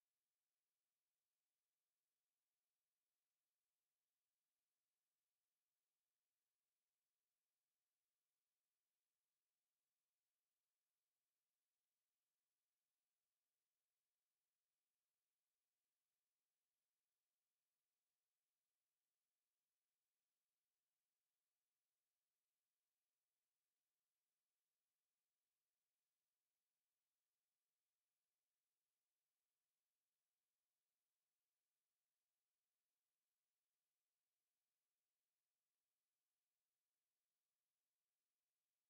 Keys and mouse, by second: 1.4 alt+click, 1.8 alt+click, 2.5 alt+click, 3.6 alt+click, 4.2 alt+click, 4.4 alt+click, 7.8 alt+click, 9.8 alt+middle click, 10.0 alt+click, 11.3 r, 12.3 click, 13.0 click, 13.6 click, 14.3 click, 15.4 w, 15.7 click, 17.8 alt+right click, 18.8 r, 19.4 click, 19.6 click, 19.8 click, 20.2 click, 23.3 click, 24.0 click, 24.6 alt+click, 25.6 alt+click, 26.5 alt+right click, 27.6 click, 27.9 alt+click, 29.0 ctrl+z, 29.8 click, 30.1 click, 30.8 w, 31.2 click, 31.6 click, 33.2 alt+right click, 36.0 ctrl+z, 36.3 shift+right click, 37.8 ctrl+click.